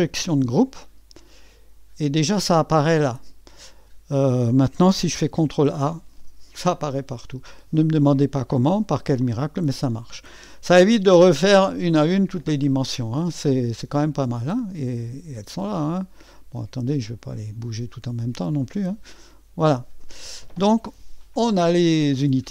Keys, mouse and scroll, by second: 5.4 ctrl+a, 8.7-9.5 scroll down 1, 9.5-10.3 scroll up 1, 13.8-16.3 drag, 16.6 click, 17.9-22.3 drag.